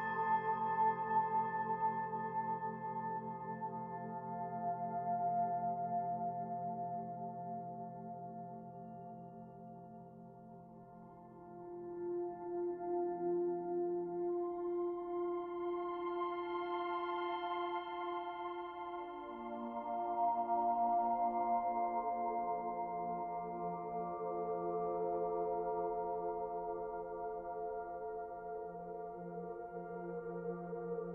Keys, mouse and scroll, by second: 1.3 s, 2.7-3.6 scroll up 1, 3.6 click, 3.6-4.0 scroll up 2, 5.5 Tab, 7.3 ctrl+b, 10.8 Tab, 11.4 middle click, 11.9-12.4 scroll up 2, 12.5 shift+middle click, 13.4 click, 18.6 click, 19.3 click, 26.1 click, 27.9 click.